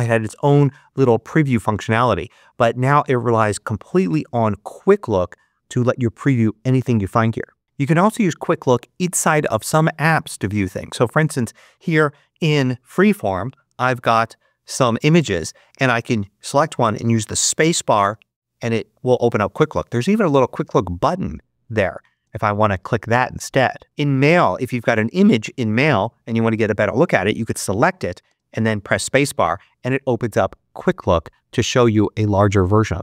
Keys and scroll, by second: 16.9 space, 22.1 space, 28.2 space.